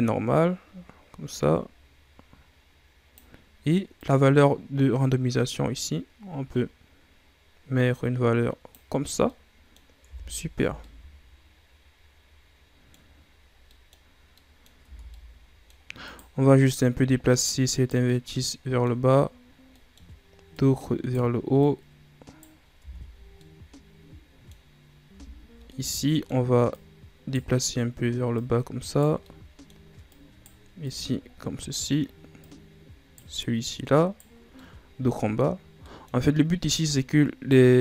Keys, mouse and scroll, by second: 3.9-6.9 drag, 9.2 middle click, 10.0 Tab, 10.5 a, 10.8-13.1 middle drag, 13.1-13.7 scroll up 2, 13.7 middle click, 14.0-14.3 scroll up 1, 14.3 middle click, 14.8 Tab, 15.1 middle click, 16.0 right click, 18.0-20.4 middle drag, 20.4 right click, 21.5 right click, 22.7 Tab, 23.2 scroll down 1, 23.4-25.1 middle drag, 25.1 Tab, 25.2-25.7 scroll up 1, 25.7-26.7 middle drag, 26.7 right click, 28.3 right click, 29.2 middle click, 30.0 right click, 30.8 right click, 32.4 right click, 33.6 right click, 34.4 scroll down 1, 34.5-37.0 middle drag, 37.0 right click.